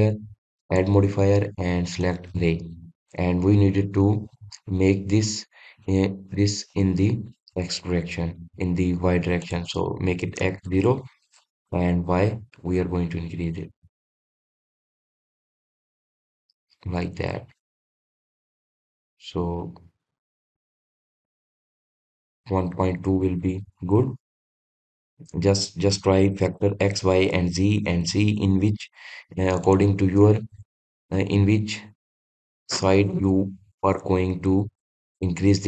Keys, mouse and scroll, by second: 2.0-3.6 drag, 9.3-12.8 drag, 13.3-16.4 drag, 19.8-21.8 middle drag, 21.8-24.5 drag, 24.5-29.5 middle drag, 29.5 click.